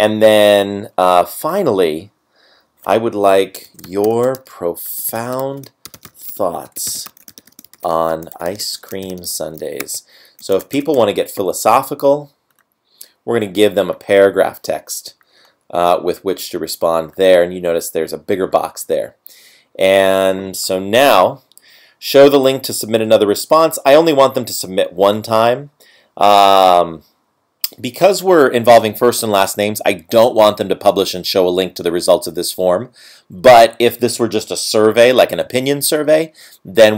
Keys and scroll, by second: 4.2 space, 5.6 space, 6.6-8.8 typing, 10.6 space.